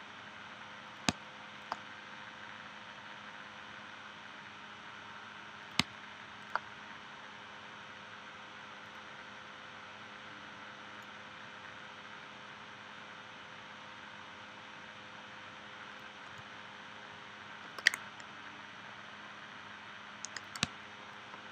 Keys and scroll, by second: 1.1 space, 5.8 space, 20.6 space.